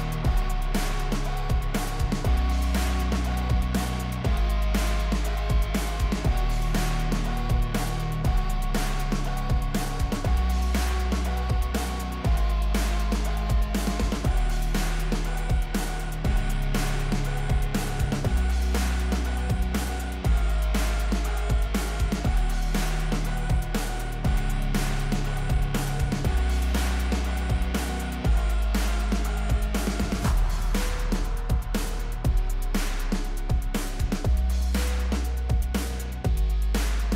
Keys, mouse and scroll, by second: 4.4-9.1 drag, 9.6-10.0 drag, 22.9 click, 24.6 n, 24.8 click, 25.1-25.4 scroll up 1, 25.4 space, 31.1 scroll up 1, 32.3 click, 33.2-34.1 scroll down 1, 34.2 click, 34.9 click, 36.1 click, 36.9-37.1 drag.